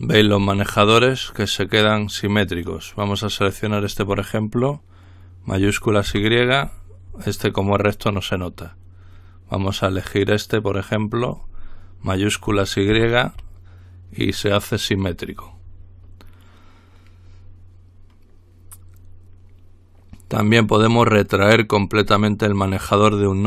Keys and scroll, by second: 6.3 y, 13.2 y.